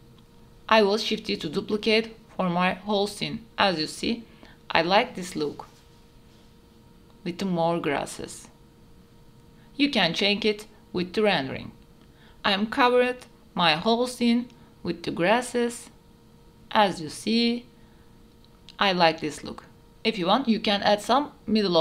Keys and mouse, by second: 1.1-1.7 shift+drag, 1.7-2.1 shift+middle drag, 2.6 shift+d, 5.5 shift+click, 6.1 click, 6.7 KP_0, 6.8 a, 6.9 a, 9.1 ctrl+s, 9.6 middle click, 9.7 click, 9.8 middle click, 9.9 KP_7, 10.6 shift+click, 10.9 shift+click, 11.1 shift+d, 11.9 click, 12.1 click, 12.6-19.4 typing, 13.1 click, 14.9 click, 16.9 shift+click, 17.1 middle click, 17.6 shift+middle click, 20.5-21.8 drag.